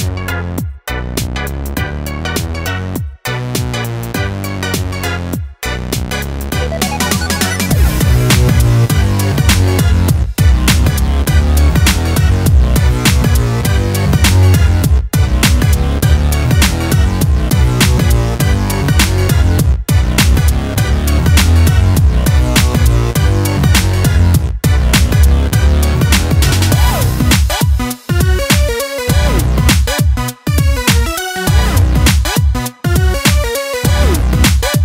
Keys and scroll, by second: 2.8 ctrl+d, 22.4 ctrl+space, 22.9 ctrl+space, 23.1-25.9 ctrl+space.